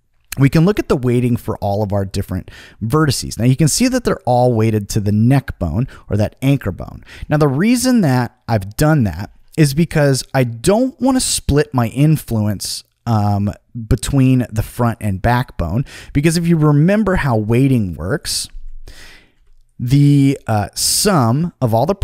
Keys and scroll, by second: 18.9 Return.